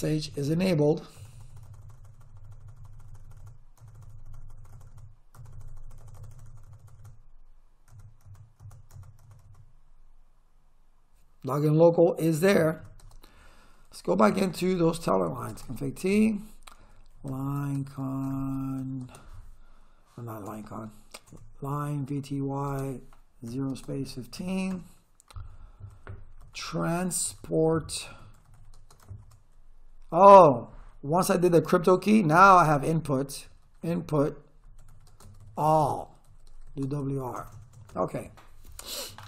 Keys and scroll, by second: 12.6 Return, 13.0 space, 14.0-19.3 typing, 20.5 BackSpace, 21.8-24.8 typing, 26.2-29.1 typing, 32.9-37.7 typing.